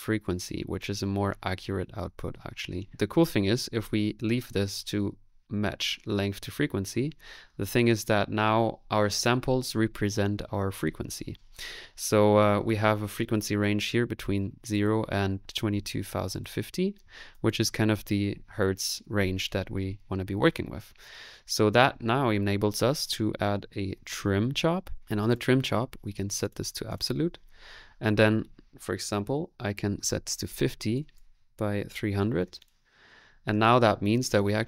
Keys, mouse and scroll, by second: 0.7 click, 1.2-2.9 middle drag, 2.9 space, 23.8-24.5 typing.